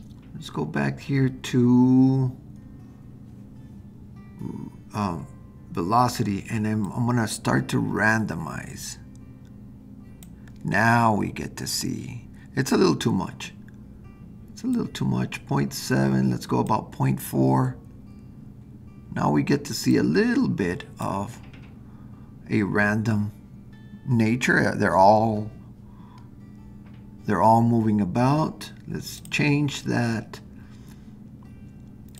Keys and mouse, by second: 6.9-10.2 drag, 14.7-16.7 drag, 19.9-21.1 drag, 29.2 click.